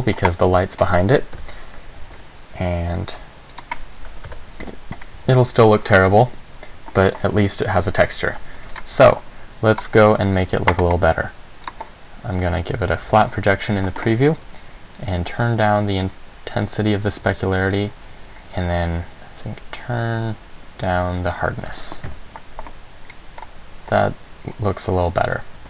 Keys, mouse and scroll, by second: 0.1 middle click, 0.9 right click, 1.5 KP_7, 2.2 g, 3.8 click, 4.4 KP_0, 8.5 Escape, 9.0 right click, 10.0 click, 11.9 click, 15.2 click, 17.9 click.